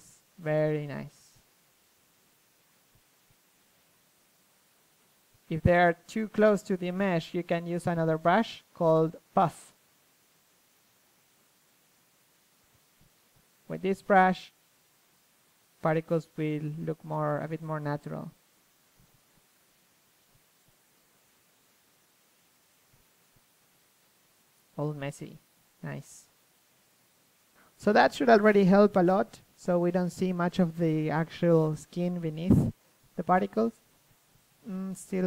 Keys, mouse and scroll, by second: 1.6 KP_3, 2.1-5.8 drag, 5.6 KP_3, 5.8 middle click, 6.3 KP_1, 7.4-8.8 drag, 8.8-10.6 middle drag, 11.4-12.9 drag, 12.9 f, 14.3-28.7 drag, 25.0 KP_3, 28.7-30.3 middle drag, 28.7 KP_1, 31.4 middle click, 31.4 KP_1, 32.1 click, 33.1 click, 33.2 middle click, 33.9 KP_1, 34.3 KP_3.